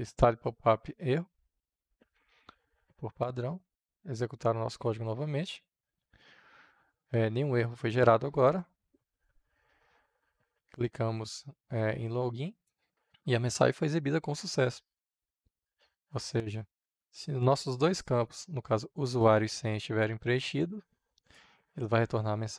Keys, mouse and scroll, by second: 2.2 ctrl+s, 3.0-4.7 drag, 4.7 F5, 7.6-19.0 drag, 18.7-20.6 typing, 19.6 click, 21.1-22.5 drag.